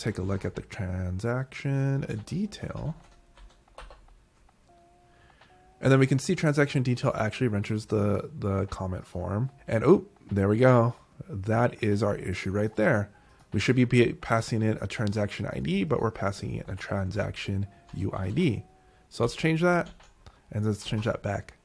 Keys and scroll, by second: 0.0-0.8 typing, 1.9-3.6 typing, 3.9 Return, 16.5 Escape, 17.2-18.9 typing, 20.2 d, 20.9 super+s.